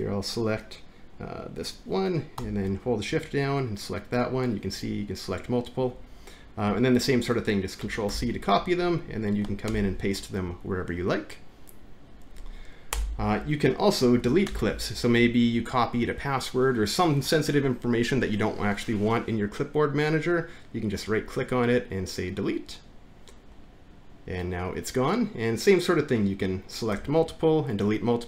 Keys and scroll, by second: 8.1 ctrl+c, 9.7 ctrl+v, 12.9 BackSpace, 14.5 alt+`.